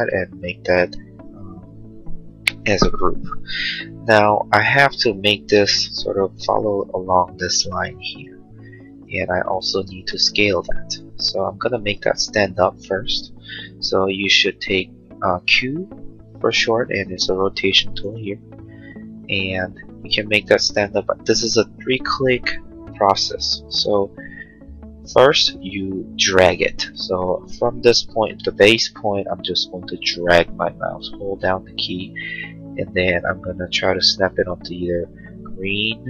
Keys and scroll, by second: 3.4 g, 12.6 q.